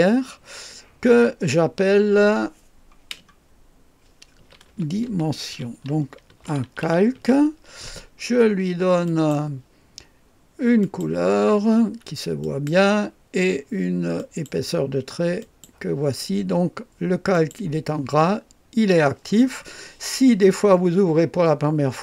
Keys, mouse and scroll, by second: 4.2-7.7 typing, 9.1 click, 10.8 click, 12.4 click, 14.2 click, 15.4 click, 17.3 click.